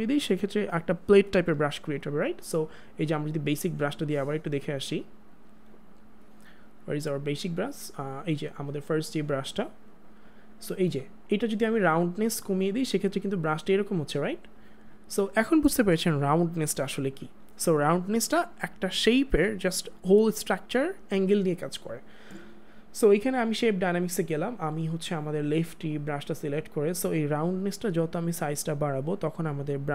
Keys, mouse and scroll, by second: 12.5 click, 16.2 click, 16.7 ctrl+z, 23.2 ctrl+z, 28.2 click.